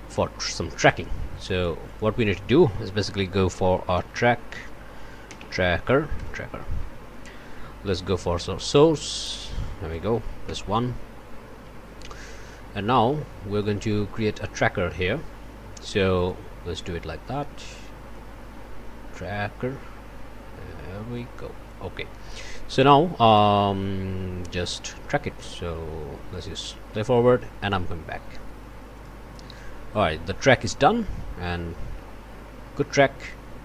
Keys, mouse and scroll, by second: 0.8 middle click, 1.2 scroll down 1, 1.4 click, 1.8-2.2 scroll down 1, 2.8 Tab, 3.7-5.9 typing, 5.9 Down, 6.2 Return, 8.7 click, 9.6 click, 10.4 1, 12.7-13.5 scroll up 6, 13.6 click, 16.1 click, 18.1-21.9 drag, 21.9 scroll up 1, 22.1-22.6 scroll down 1, 22.7 click, 23.3 click, 26.3 click, 28.9 click.